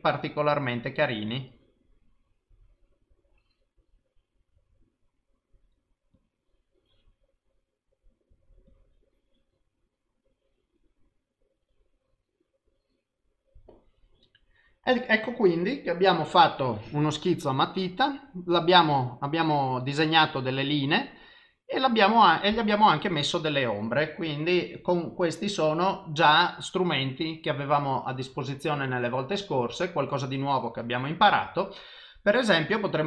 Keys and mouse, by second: 1.4 click, 6.2 click, 8.7 click, 11.6 click, 17.8 click, 18.9 click.